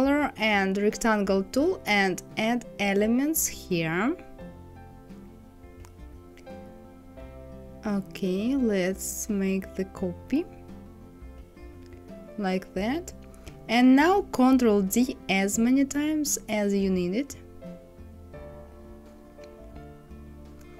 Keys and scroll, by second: 13.9 ctrl+d, 14.9 ctrl+d, 19.0 ctrl+d.